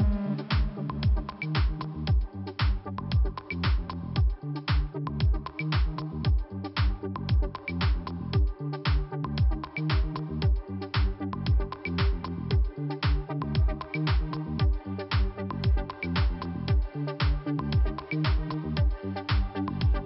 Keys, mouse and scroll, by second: 0.6 click, 1.1 click, 2.0 scroll up 1, 3.3 click, 4.4 click, 4.7 click, 5.8 click, 6.9 click, 7.3-7.6 scroll down 1, 10.2 click, 11.8 click, 14.1 click, 14.4 click, 15.5 click, 15.6 click, 16.3 scroll down 1, 17.3 scroll up 1, 19.0 click, 19.4 click, 19.5 double click.